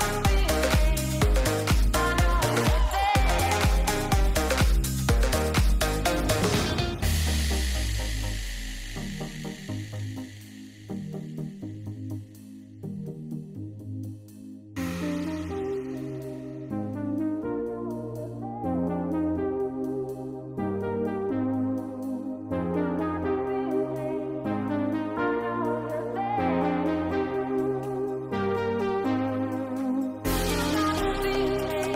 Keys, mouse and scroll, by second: 0.4-1.7 drag, 2.4 shift+middle click, 3.7 click, 4.4 click, 4.8 g, 6.8 shift+middle click, 7.8 click, 8.3 click, 9.0 click, 9.4 click, 10.1 click, 11.3 ctrl+a, 11.9 ctrl+a, 12.3 ctrl+a, 12.6 ctrl+a, 13.2 click, 14.5 click, 15.5 click, 17.0 click, 17.3 click, 17.6 click, 17.9 click, 18.5 click, 19.1 click, 20.2 ctrl+a, 21.4 ctrl+a, 21.7 ctrl+a, 21.9 ctrl+a, 22.1 ctrl+a, 22.3 ctrl+a, 22.9 middle click, 24.3 middle click, 25.4 click, 26.2 click, 27.1 click, 28.2 ctrl+a, 28.3 ctrl+a, 29.0-29.4 ctrl+a, 29.5 ctrl+a, 30.1 ctrl+a.